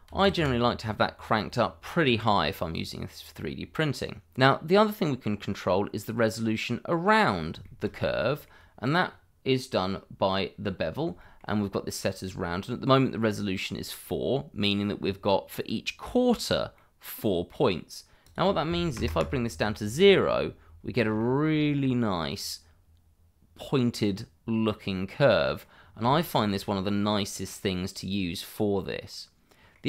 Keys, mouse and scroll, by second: 0.0 3, 0.3 Return, 1.9 scroll down 1, 2.5 middle click, 3.3 scroll up 1, 4.0 middle click, 5.2 scroll up 1, 5.6 middle click, 7.6 shift+middle click, 9.0 scroll down 1, 11.2 shift+middle click, 16.7 middle click, 18.2 click, 18.9 KP_0, 19.1 Return, 20.0 scroll down 1, 20.3 middle click, 25.8 scroll down 1, 26.1 shift+middle click.